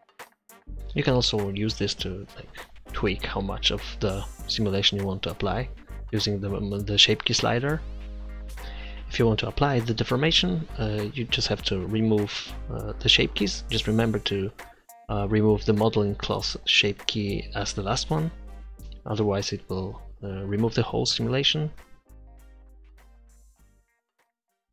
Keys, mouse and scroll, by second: 1.8 click, 9.2 middle click, 9.9-10.9 drag, 10.9 middle click, 14.0 click, 17.0-18.5 drag, 20.0-22.3 drag, 21.9 right click, 22.8 click, 23.1 Tab, 23.6 Tab, 24.0 Tab, 24.3 Tab.